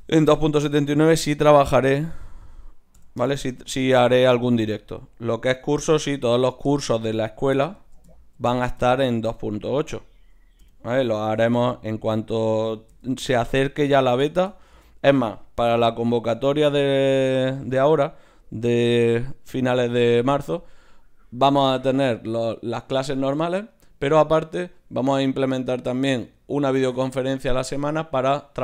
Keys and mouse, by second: 1.8-6.0 drag, 6.0 KP_1, 9.8-11.5 right drag, 10.6 l, 11.2 l, 11.6 l, 12.9 z, 13.6-15.6 middle drag, 15.6 g.